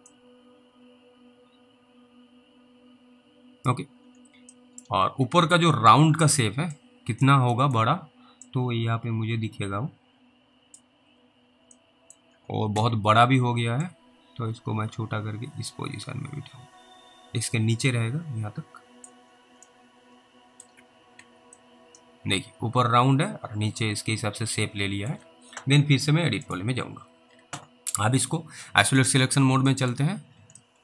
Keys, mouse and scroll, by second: 0.4 click, 3.9-4.3 scroll down 3, 4.8 alt+middle click, 5.0 alt+w, 5.4 alt+w, 5.8 middle click, 6.1-7.0 scroll up 3, 7.0 click, 7.8 middle click, 8.7 click, 11.0-11.8 scroll up 2, 12.0 middle click, 12.8 w, 14.1 click, 19.2-19.6 scroll down 2, 19.9 middle click, 20.8 alt+w, 21.2 alt+w, 21.8 alt+middle click, 26.5 click, 30.0 alt+middle click, 30.1 scroll up 1.